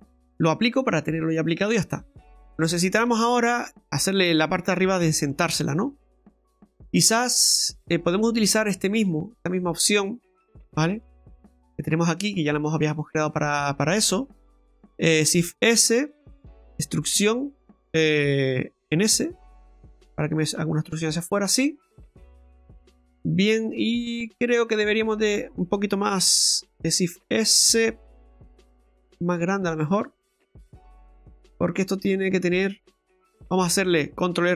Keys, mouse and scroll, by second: 1.3 click, 2.5 right click, 2.5 middle click, 3.0 shift+middle click, 5.0 Tab, 5.3-5.8 scroll up 3, 5.9 Tab, 6.3 right click, 6.6 Tab, 7.1 shift+middle click, 8.0 right click, 9.6 click, 10.6 right click, 10.9 alt+shift+right click, 11.6 right click, 11.8 right click, 12.1 alt+shift+right click, 12.9 middle click, 14.9 shift+s, 16.6 e, 21.8 middle click, 23.6 middle click, 23.6 scroll up 1, 23.9 middle click, 26.8 shift+s, 28.1 s, 30.2 middle click, 31.3 shift+middle click, 32.2 middle click.